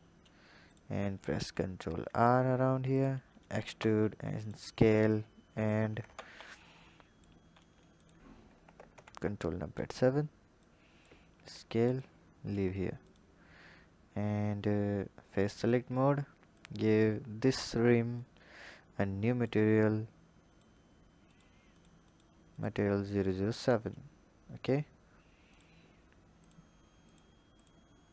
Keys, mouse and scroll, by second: 0.5 click, 1.4 ctrl+r, 3.4 e, 5.1 click, 6.0 ctrl+z, 6.4 click, 7.4 s, 8.7 ctrl+KP_7, 10.5 click, 12.9 click, 15.5 click, 16.4 click, 18.1 click, 20.3-25.4 drag, 26.3 alt+click, 27.0 alt+click, 27.5 alt+click, 28.0 alt+click.